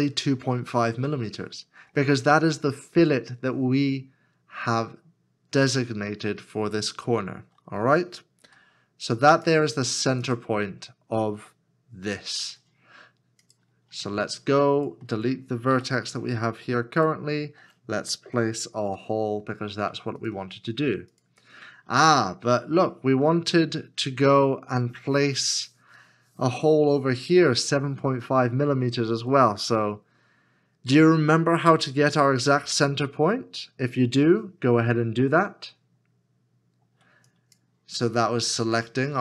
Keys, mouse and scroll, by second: 8.4 x, 11.2 x, 15.7 x, 18.8 shift+a, 21.5-22.3 scroll down 1, 22.3-22.7 scroll up 1, 23.3 shift+middle click, 39.0 s.